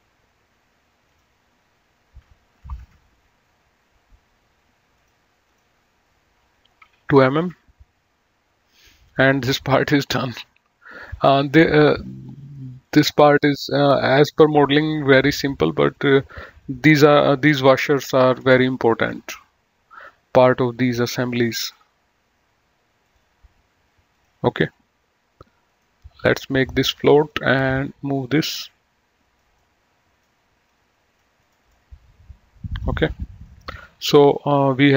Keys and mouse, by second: 1.3 click, 2.8 KP_1, 2.8 KP_5, 2.9 Return, 5.0 click, 7.1 KP_2, 7.3 KP_Enter, 9.2 click, 11.0 click, 12.9 click, 14.5 click, 16.2 click, 18.7 BackSpace, 19.0 KP_Enter, 21.6 click, 23.3 click, 25.9 right click, 27.4 click, 28.6 click, 29.9 middle click, 30.9 click, 31.9 middle click.